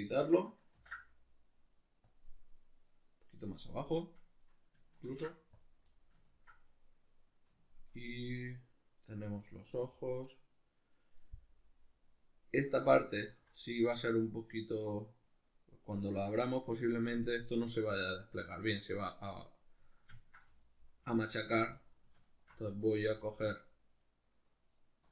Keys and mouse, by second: 0.8 ctrl+e, 4.4 right click, 5.0 ctrl+e, 5.9-15.9 middle drag, 15.9 right click, 20.2 ctrl+middle click, 20.6 alt+right click, 21.5 middle click, 22.3 alt+shift+right click, 22.7 middle click, 23.3 alt+shift+right click, 24.0 alt+shift+right click, 24.7 alt+shift+right click.